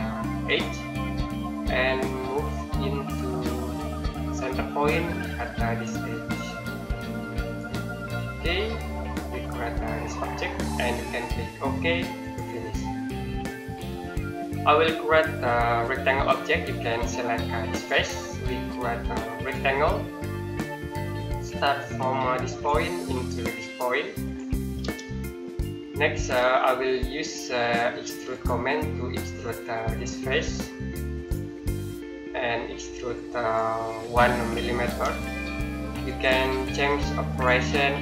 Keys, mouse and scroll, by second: 0.3 click, 1.0-1.4 scroll down 1, 1.4-2.1 scroll up 1, 3.1 middle click, 4.0 scroll down 1, 7.3 click, 8.0 scroll down 1, 8.1-8.4 scroll up 1, 10.0 middle click, 12.0 click, 13.0 middle click, 14.8 scroll down 1, 17.5 click, 20.7 middle click, 22.3 click, 25.3 middle click, 26.4 middle click, 28.1 click, 34.7 1, 37.1 click.